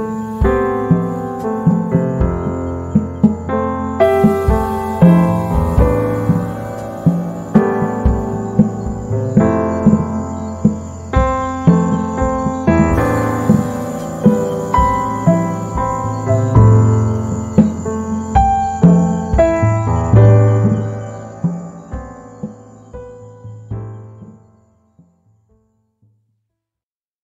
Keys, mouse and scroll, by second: 5.3 right click, 6.3 Right, 8.3 z, 8.4 right click, 9.1 space, 9.6 z, 9.9 click, 11.1 right click, 11.6-14.0 drag, 14.0 h, 14.3 click, 14.7 space, 17.4 h, 17.6 click, 17.8 space, 20.6 click.